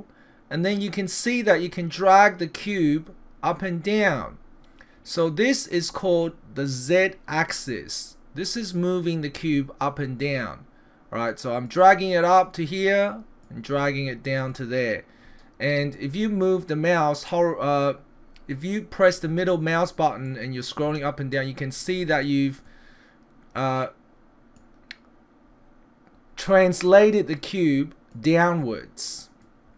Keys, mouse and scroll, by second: 11.6 click, 13.4 click, 15.9 middle click, 19.1 middle click, 20.3 middle click, 21.3 middle click, 22.2 middle click, 24.6 click, 28.1 click.